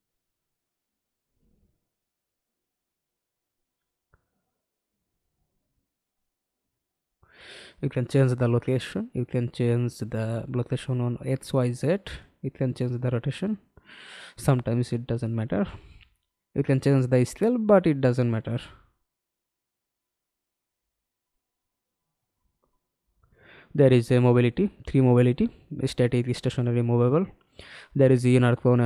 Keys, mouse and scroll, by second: 2.9-3.8 scroll up 4, 3.8-6.9 scroll up 3, 19.2 double click, 22.5 double click, 28.7-28.8 scroll down 2.